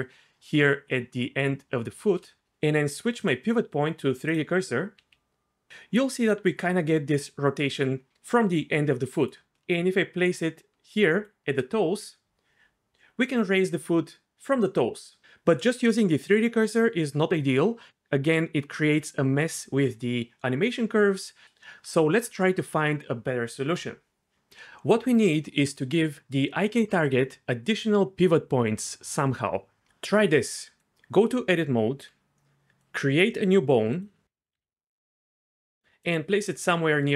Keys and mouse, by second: 3.2-4.4 drag, 5.0 r, 5.8 r, 9.2 right click, 10.4 shift+right click, 11.8 r, 31.1 Tab, 33.3 shift+a, 34.2 ctrl+z, 34.5 s, 35.3 click, 36.3 g.